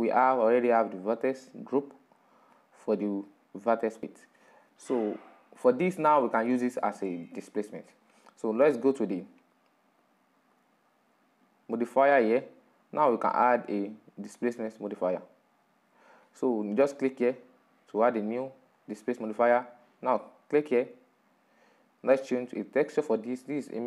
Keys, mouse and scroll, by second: 4.1-14.9 middle drag, 14.9-23.8 drag.